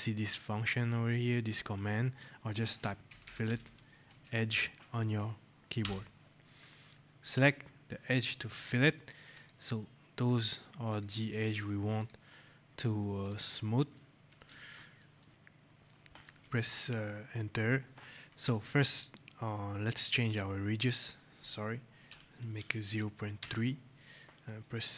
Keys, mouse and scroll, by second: 2.7-4.0 typing, 5.7 Return, 9.2 click, 13.8 right click, 13.9 click, 14.6 shift+click, 15.1 right click, 15.2 shift+click, 15.4 click, 20.2 click, 22.0 KP_0, 22.6 KP_Decimal, 22.8 KP_3, 23.3 Return.